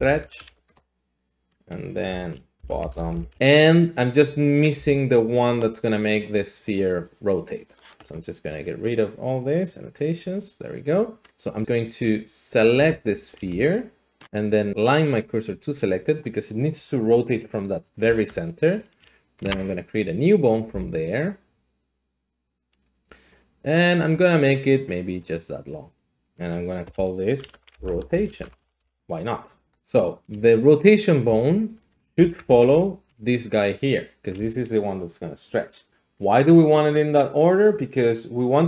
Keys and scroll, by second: 0.0-0.5 typing, 0.7 Return, 2.0 F2, 2.6-7.8 typing, 9.4 d, 12.9 Tab, 13.5 s, 14.0 s, 14.9 s, 18.0 Tab, 19.4 a, 20.7 s, 26.8 F2, 27.5-28.8 typing, 29.0 Return, 31.3 g, 32.2 Escape.